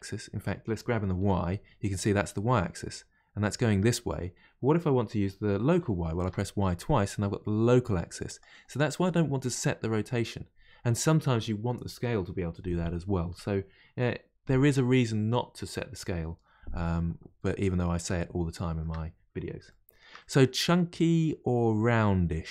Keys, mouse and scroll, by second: 17.4 middle click, 18.1-18.5 scroll down 2, 19.7-22.5 shift+middle drag.